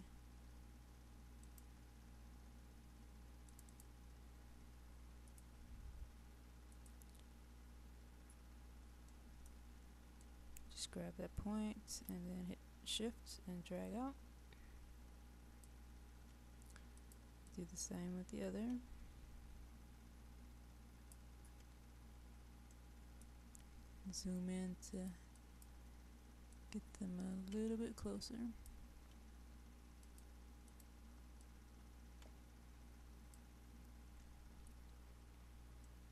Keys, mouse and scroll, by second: 8.5-9.1 scroll up 1, 9.1 middle click, 10.2-15.7 drag, 17.0-21.2 drag, 21.7-22.7 scroll down 1, 22.7 middle click, 23.3-23.8 scroll down 1, 24.9-28.8 drag, 30.0-33.4 drag, 34.6-35.8 scroll up 1, 35.8-36.1 middle drag.